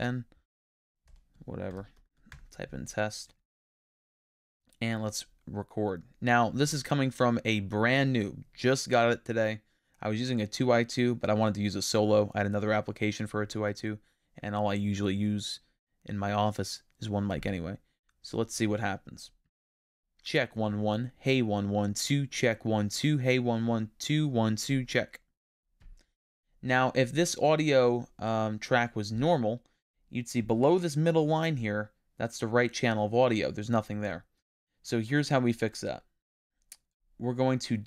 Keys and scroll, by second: 1.1 BackSpace.